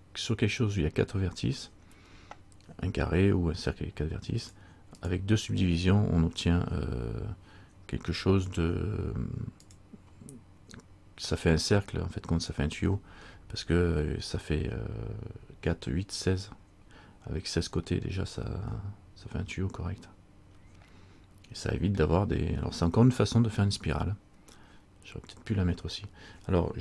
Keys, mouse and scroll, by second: 4.6 click, 5.1 click, 8.2 Tab, 9.8 click, 18.0 middle click, 21.2 middle click.